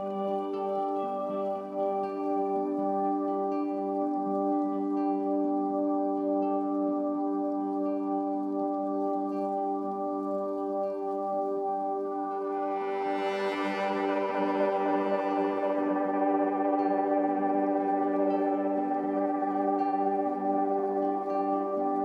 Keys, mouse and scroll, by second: 0.2-0.7 typing, 2.1-2.8 typing, 3.2 ctrl+a, 4.9-8.4 typing, 6.1 Tab, 7.5 click, 9.9 click, 10.6 typing, 11.8 click, 11.8 typing, 13.1-14.4 ctrl+alt+shift+drag, 14.7-16.6 alt+shift+drag, 17.0-22.0 ctrl+alt+drag.